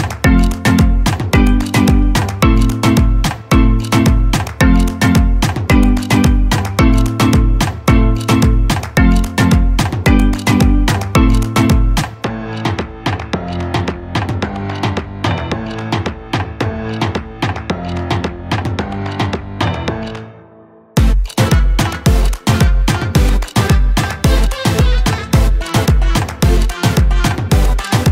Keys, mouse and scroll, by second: 1.5 right click, 2.5 click, 5.3 click, 5.4-16.1 drag, 16.1-19.2 drag, 19.2 ctrl+z, 21.1-28.1 drag.